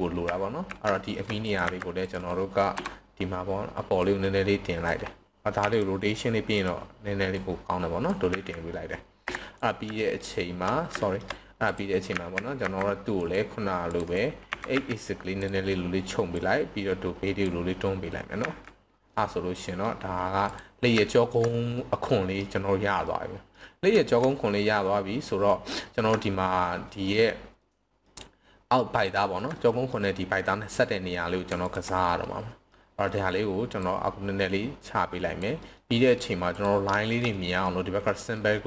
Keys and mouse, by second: 0.3 z, 1.0 shift+middle click, 1.6 c, 2.1 right click, 2.6 KP_3, 4.1-4.8 drag, 5.6 r, 6.5 click, 7.2-8.1 drag, 8.3 z, 9.1 KP_7, 9.6-10.4 right drag, 10.9 shift+middle drag, 12.1 z, 12.6 c, 13.8 click, 14.1-14.5 right drag, 14.5 s, 14.6 x, 15.4 drag, 16.3-17.4 drag, 18.4 z, 19.1-19.9 middle drag, 20.4 drag, 21.0 shift+middle click, 21.7-22.4 middle drag, 23.0-23.5 middle drag, 24.0 shift+middle click, 24.3-25.3 middle drag, 25.8 shift+middle click, 26.2-27.0 middle drag, 27.6-28.0 middle drag, 29.2 shift+middle click, 29.6-29.9 middle drag, 30.4-30.9 middle drag, 32.3-32.7 middle drag, 33.9 click, 35.6 middle click, 36.6 click, 37.0 shift+middle click, 37.3 middle click, 38.1 middle click.